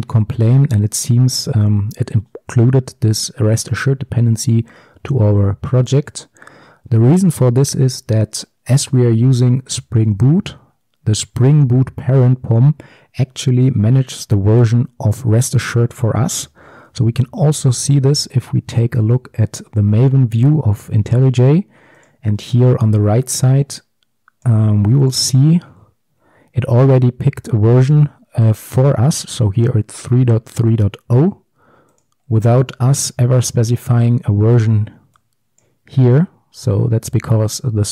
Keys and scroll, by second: 16.7 ctrl+shift+super+a.